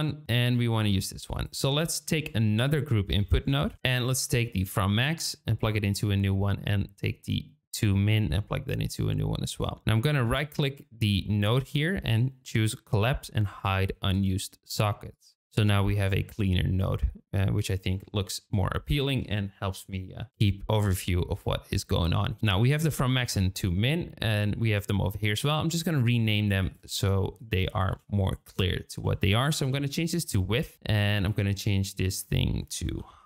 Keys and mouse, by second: 0.9 click, 2.0 shift+a, 4.4-5.7 drag, 7.8-8.7 drag, 9.6 click, 10.3 click, 15.1 click, 15.7-17.5 drag, 18.8 shift+middle click, 25.2 click, 26.7-30.6 drag, 31.2 click, 32.0-33.2 drag.